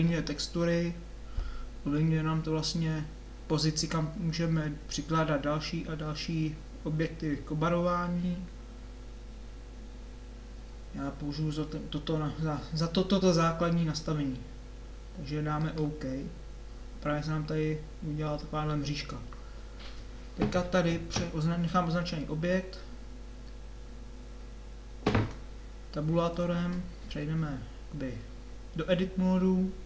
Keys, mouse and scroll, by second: 20.5-26.4 middle drag, 26.4 Tab.